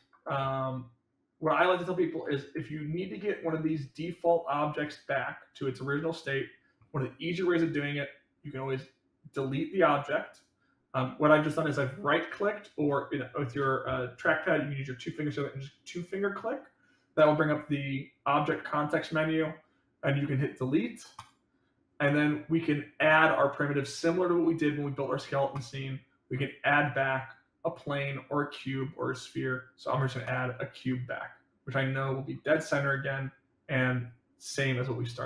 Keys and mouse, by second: 0.9 click, 2.2-3.1 middle drag, 3.3-3.7 middle drag, 4.7-6.2 middle drag, 25.5-30.4 drag, 30.9-32.3 middle drag, 32.9-34.7 middle drag.